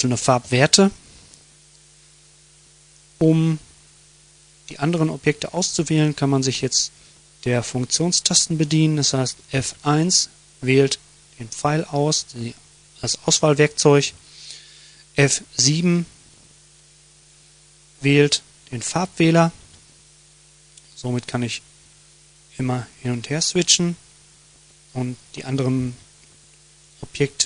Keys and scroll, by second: 8.9 F1, 18.8 F7, 21.9 F1, 23.8 F7, 25.0 F7, 25.5 F1, 26.6 F7.